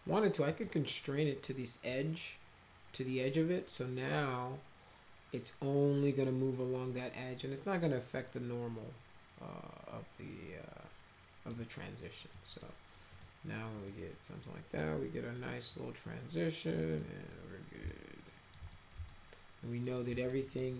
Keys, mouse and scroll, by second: 0.5 click, 1.9-11.5 drag, 12.3 middle click, 13.1 click, 13.8 click, 15.4 middle click, 16.4 middle click, 17.0 middle click, 17.9 alt+middle click, 18.7 middle click, 19.1 alt+middle click, 20.1 middle click, 20.4 middle click.